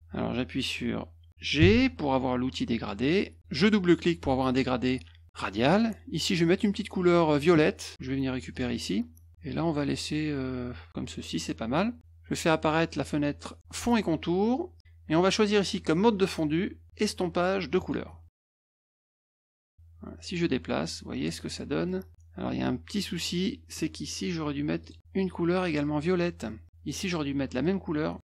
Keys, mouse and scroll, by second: 1.6 g, 3.9 click, 4.0 click, 6.5 click, 8.5 click, 9.6 click, 13.7 click, 15.4 click, 17.8 click, 19.0 click, 19.4-21.2 drag, 21.5 middle click, 22.1-23.7 drag, 24.8 click, 27.0 click, 27.6 click.